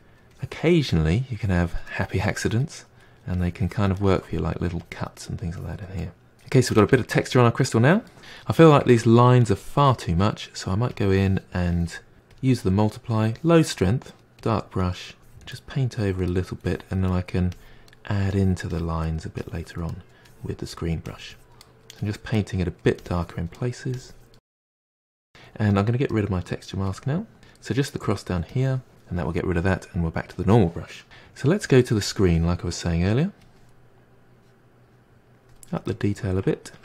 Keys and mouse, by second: 0.0-0.3 middle drag, 0.3-0.9 drag, 0.9-1.4 middle drag, 1.4-1.9 drag, 1.9-2.3 middle drag, 2.3-2.6 drag, 2.6-3.3 middle drag, 3.3-4.0 drag, 4.0-4.8 middle drag, 4.8-5.2 drag, 5.2-5.6 middle drag, 5.6-6.0 drag, 6.0-8.2 middle drag, 8.4-10.9 middle drag, 10.9-12.3 drag, 14.2 f, 15.1 click, 15.4-15.7 middle drag, 15.7-16.2 drag, 16.2 middle drag, 16.4 drag, 16.7 middle drag, 17.0-17.3 drag, 17.3 middle drag, 17.6 click, 18.0 middle drag, 18.3 drag, 18.5 middle drag, 18.8-19.1 drag, 19.1 middle drag, 19.4 drag, 19.6 middle drag, 19.9-20.4 drag, 20.4 middle drag, 20.6-20.9 drag, 20.9 middle drag, 21.2 click, 21.5 middle drag, 21.7-22.1 drag, 22.1 middle drag, 22.4 drag, 22.6-23.0 middle drag, 23.0-23.4 drag, 23.4 middle drag, 23.6-24.2 drag, 24.2 f, 27.2-31.0 drag, 31.0 f, 32.0-35.8 drag, 35.8-36.8 middle drag.